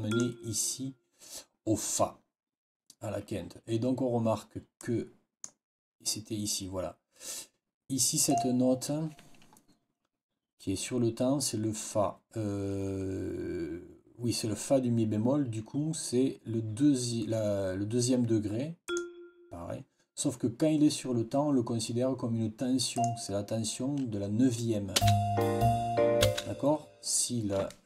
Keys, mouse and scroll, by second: 0.0 click, 4.7 click, 8.2 click, 18.8 click, 22.8 click, 24.9 space, 26.1 space.